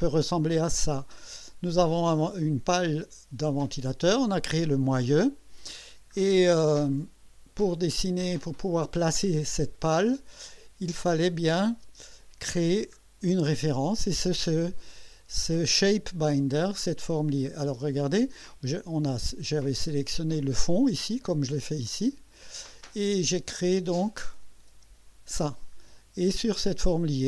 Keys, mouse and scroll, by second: 1.0 click, 5.9 scroll down 1, 6.4-6.7 scroll down 1, 7.6 scroll down 1, 8.3 scroll up 1, 10.5 scroll down 2, 11.5 click, 11.8 space, 12.6-12.9 scroll up 2, 17.5 click, 21.5 click, 22.1 click, 23.2 click, 24.4 click, 24.7 space, 25.9-26.6 scroll up 2.